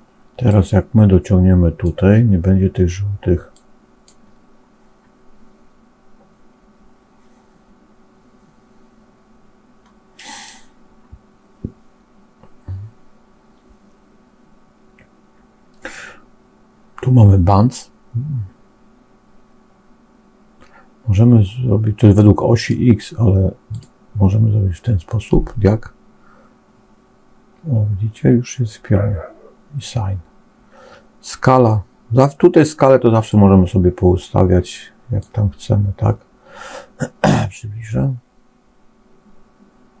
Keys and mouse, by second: 0.5-1.9 drag, 3.4 click, 22.6-23.8 drag, 33.2-35.2 drag, 37.9-40.0 drag.